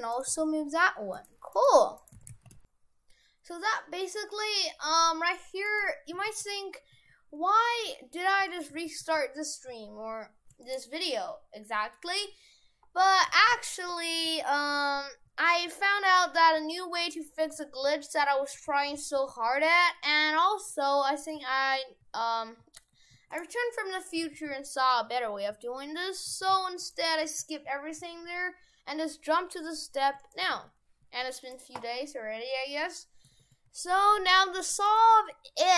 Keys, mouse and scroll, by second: 0.1 right click, 0.3 r, 1.6 right click, 2.0 right click, 2.2 shift+f.